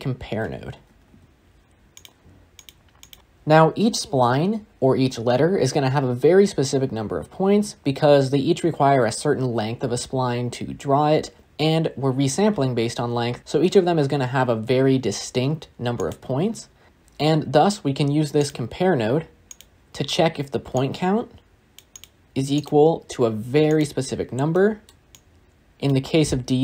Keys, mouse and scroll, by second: 1.9 shift+a, 16.9 click, 19.5-21.6 drag, 23.7-25.8 drag.